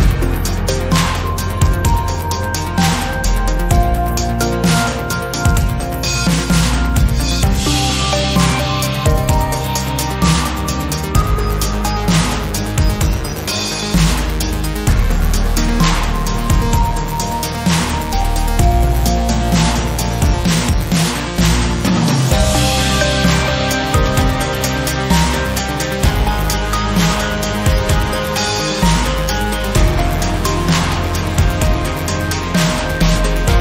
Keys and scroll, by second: 16.1 Tab, 25.2 g, 27.5 z.